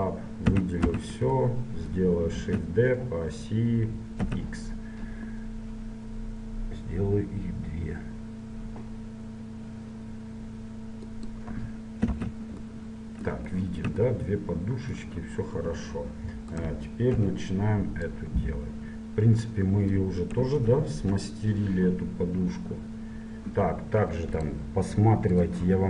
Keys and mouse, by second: 0.5 a, 1.0 a, 1.5 middle click, 2.5 shift+d, 12.3 Tab, 12.8 middle click, 16.7-18.3 right drag, 17.3 KP_7, 18.6-20.1 drag, 20.5 KP_1, 20.9 KP_3, 21.9-24.6 middle drag.